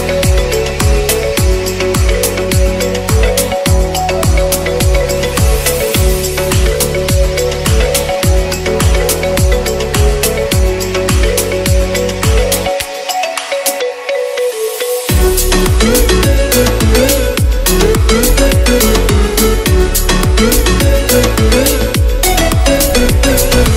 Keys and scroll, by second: 13.2 [.